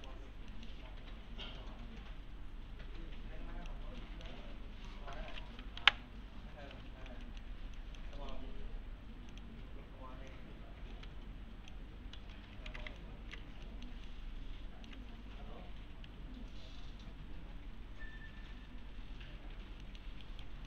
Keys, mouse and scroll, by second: 0.0 click, 0.5 middle click, 1.4-3.6 click, 4.0 alt+middle click, 4.4 1, 4.9 click, 6.9 ctrl+z, 7.2 middle click, 7.8 click, 8.2 middle click, 9.3 click, 10.9 s, 12.1 s, 12.7 alt+x, 13.0-13.6 alt+middle click, 13.4 1, 13.7 middle click, 14.1-15.0 alt+middle click, 19.8 middle click, 20.2 right click.